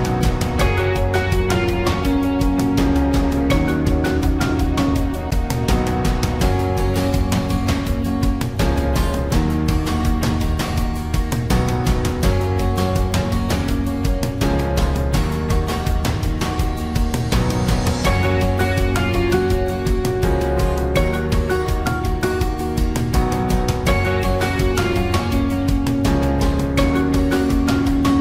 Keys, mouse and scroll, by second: 8.0 ctrl+click, 10.5 ctrl+c, 16.1 ctrl+v, 19.1 ctrl+t, 26.6 Return.